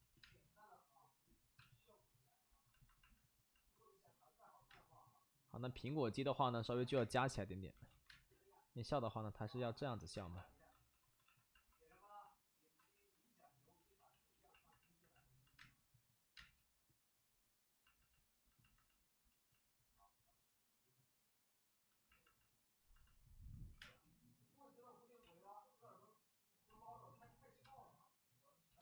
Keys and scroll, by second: 0.0 ctrl+z, 0.2 space, 1.5 space, 4.6 space, 5.8 space, 6.2 ctrl+z, 6.8 alt+s, 6.9 space, 8.0 ctrl+z, 8.0 space, 10.1 alt+s, 10.7 d, 10.8 d, 11.0 d, 11.2 d, 12.8 ctrl+z, 12.9 ctrl+z, 13.1 ctrl+z, 13.3 ctrl+z, 13.5 ctrl+z, 15.5 space, 16.3 space, 19.7 space, 19.9 space, 23.7 1, 23.7 space, 25.2 ctrl+z, 27.2 ctrl+z, 27.6 space, 28.1 space, 28.2 space.